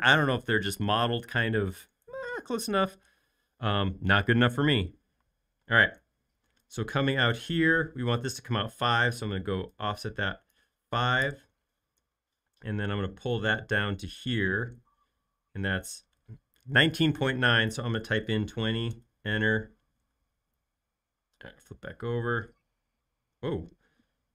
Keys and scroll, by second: 5.8 |, 8.1 space, 9.0 f, 11.2 Return, 12.3 p, 18.0-19.0 typing, 20.2 space.